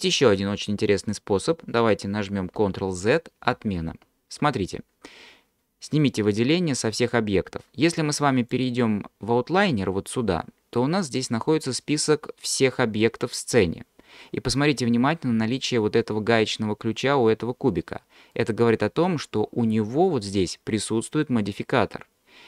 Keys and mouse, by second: 3.5 ctrl+z, 4.0 ctrl+z, 6.0 click, 8.0 click, 18.4 click.